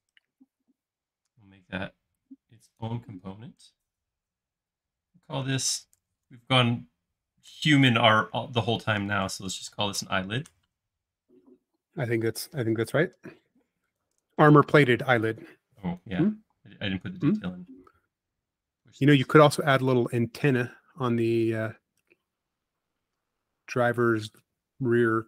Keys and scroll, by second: 5.3-6.5 typing, 7.5 space, 9.0-10.2 typing, 10.5 Return, 12.1 space, 14.7 f, 16.2-16.9 typing, 17.5 Escape, 21.0 |.